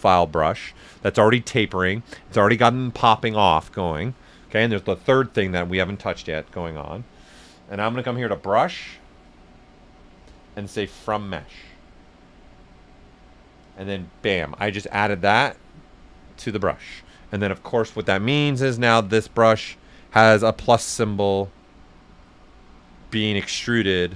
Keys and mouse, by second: 8.0 click, 8.0 typing, 9.3 click, 13.6 click, 14.4-17.9 drag, 14.4 typing, 17.9 s, 18.0 click, 19.1 click, 20.2 right click, 23.8 right click.